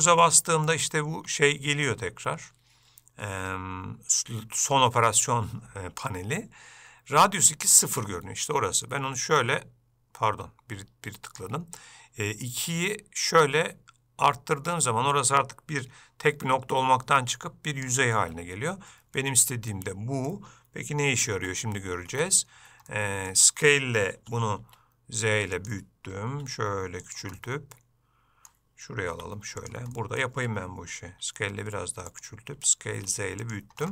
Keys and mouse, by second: 19.4 middle click, 21.5 Tab, 22.2 Tab, 23.0 middle click, 24.2 middle click, 27.5-28.6 middle drag, 30.1 middle click, 32.7 s.